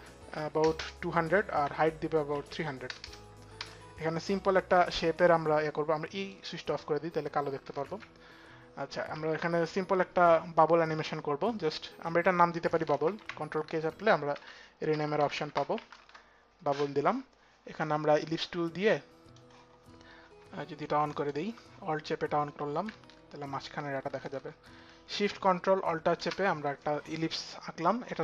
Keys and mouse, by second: 0.0 click, 0.0 KP_2, 0.3 KP_0, 1.3 Tab, 2.0 KP_3, 2.6 KP_0, 3.2 Return, 5.9 click, 6.7 Return, 6.7 click, 7.3 shift+Return, 7.3 click, 8.8 click, 8.8 v, 12.7 ctrl+k, 12.7 v, 14.0-15.7 typing, 19.0-19.7 typing, 19.2 click, 21.2 alt+click, 25.9 alt+shift+click.